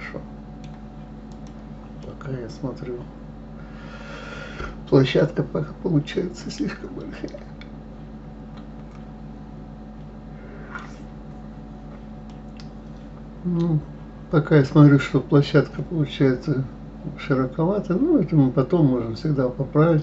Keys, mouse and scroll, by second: 1.3 click, 2.0-5.0 middle drag, 12.2-15.4 middle drag.